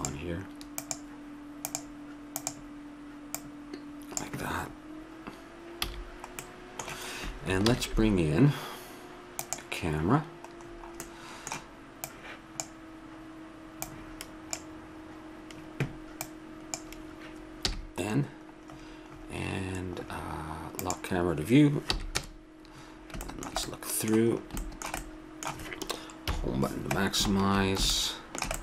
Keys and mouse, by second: 0.0-1.0 drag, 5.8 a, 6.6-7.7 middle drag, 7.7 shift+a, 10.6 middle click, 12.1 click, 13.8-15.6 drag, 16.2-17.6 drag, 17.6 n, 20.8 middle click, 21.9 n, 22.1 KP_0, 26.3 Home.